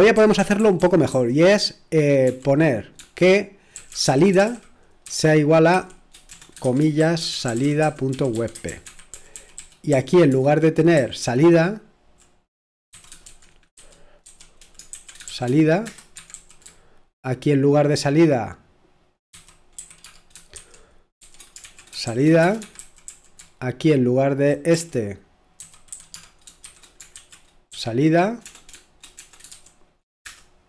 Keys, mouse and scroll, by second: 3.5-4.9 typing, 5.0 Return, 6.9-17.9 typing, 19.1-30.6 typing.